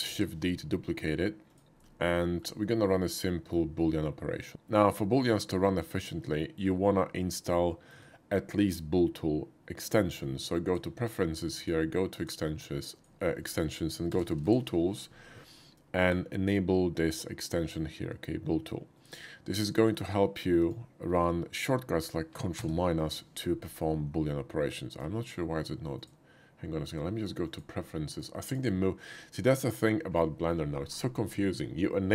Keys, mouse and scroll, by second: 0.0 shift+d, 1.4 click, 2.2 shift+middle click, 2.6-3.5 shift+middle drag, 4.4 shift+middle click, 4.7-6.5 middle drag, 7.7 shift+middle click, 9.8 shift+click, 11.4 click, 12.1 click, 12.9 click, 14.1 b, 14.3 o, 14.5 l, 18.9 click, 19.6 click, 22.5 ctrl+KP_Subtract, 24.2-25.0 middle drag, 25.9 click, 27.4 click, 28.2 click, 29.2-29.8 drag.